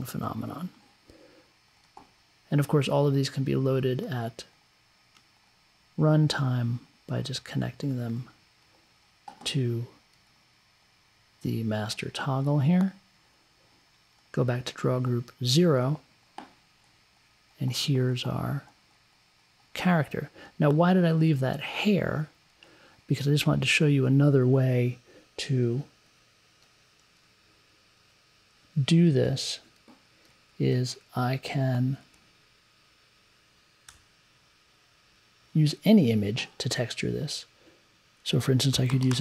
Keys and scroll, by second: 33.8 2, 38.5-39.2 typing.